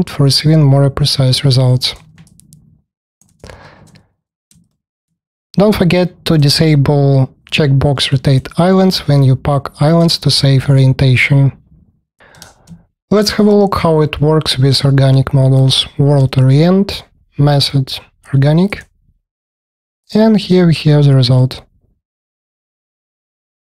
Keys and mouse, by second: 1.9 middle click, 2.3 alt+click, 2.5 alt+click, 2.7 alt+click, 3.5 ctrl+shift+KP_1, 4.8 alt+click, 10.8 click, 12.4 space, 12.4 KP_1, 20.4-22.0 alt+drag.